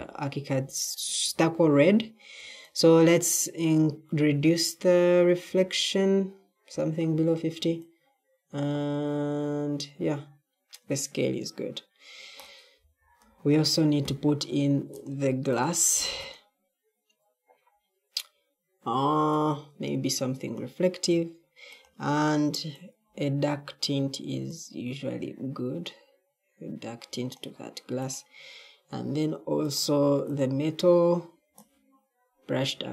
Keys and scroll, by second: 12.7 e.